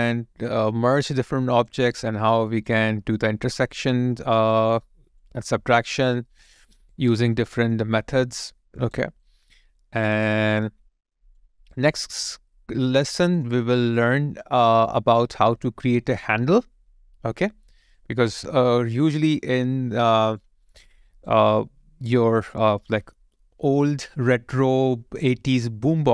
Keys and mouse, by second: 1.9 alt+right click, 3.5 alt+right click, 4.8 alt+click, 7.3 alt+middle click, 7.9 alt+right click, 9.2 alt+click, 11.5 alt+right click, 11.9 alt+click, 12.9 alt+middle click, 13.5 alt+right click, 13.9 alt+click, 14.9 alt+middle click, 15.3 alt+click, 18.7 alt+middle click, 19.5 alt+click, 20.6 alt+right click.